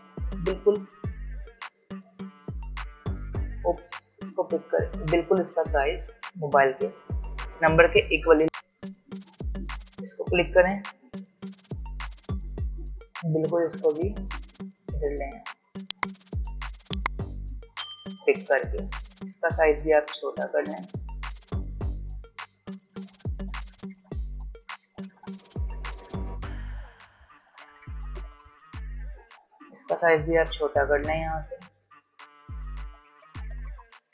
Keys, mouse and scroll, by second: 1.3 alt+shift+click, 3.5 ctrl+z, 4.8 alt+shift+click, 8.4-8.8 alt+scroll down 1, 8.8-16.2 drag, 16.2-16.7 alt+scroll up 1, 17.4-18.7 drag, 22.4 alt+scroll up 1, 22.9-28.5 drag, 30.3-30.6 alt+scroll down 1, 32.5-34.0 alt+shift+drag, 34.0-34.1 alt+scroll down 1.